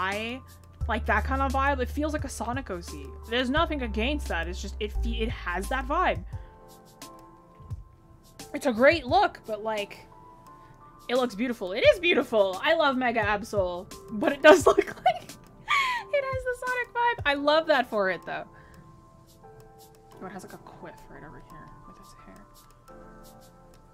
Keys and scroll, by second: 2.3 ctrl+z.